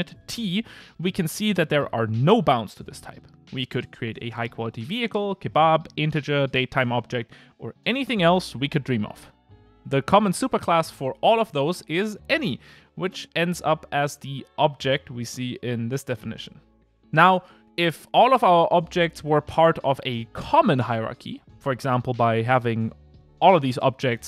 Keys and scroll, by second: 22.6 Return.